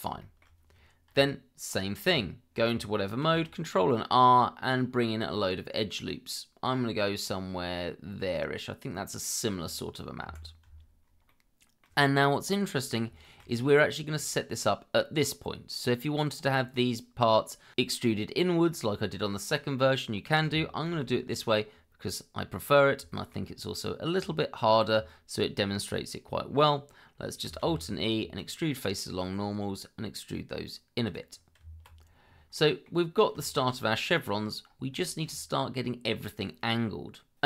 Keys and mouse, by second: 0.2 shift+middle drag, 1.1 Tab, 3.2 ctrl+r, 9.7 click, 10.2 Escape, 11.3 middle click, 13.2 shift+middle click, 20.9 ctrl+b, 23.1 shift+middle click, 27.6 alt+e, 31.0 click, 31.6 Tab, 32.5-32.8 middle drag, 33.4 shift+middle drag, 35.1 shift+middle drag.